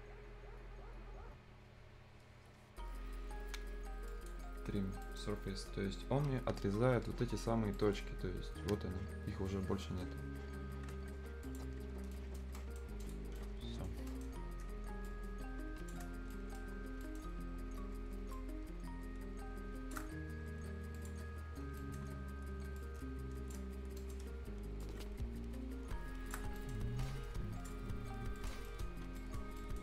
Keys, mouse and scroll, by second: 4.1 click, 4.9 scroll down 1, 5.0 right click, 7.1 F10, 7.8 right click, 8.1-8.5 scroll up 1, 10.2-10.5 scroll up 1, 10.5 scroll down 1, 10.8 Escape, 11.4 click, 11.7 scroll down 1, 12.0 scroll up 1, 12.1 right click, 12.4 scroll down 1, 12.6 right click, 12.9 scroll up 1, 13.0 click, 13.4 right click, 14.1 right click, 15.1 click, 16.1 shift+scroll down 1, 16.3 right click, 16.8 scroll up 1, 17.0 right click, 18.3-21.0 shift+drag, 21.0 click, 21.2 scroll down 1, 21.4 scroll up 1, 21.8 right click, 22.0-22.8 scroll up 1, 22.8 click, 23.7-24.0 scroll up 1, 24.0 right click, 24.8-26.5 shift+drag, 26.5 scroll up 1, 26.6 right click, 27.0 click, 28.7 right click, 28.9-29.6 scroll down 2, 29.2 right click, 29.6 right click.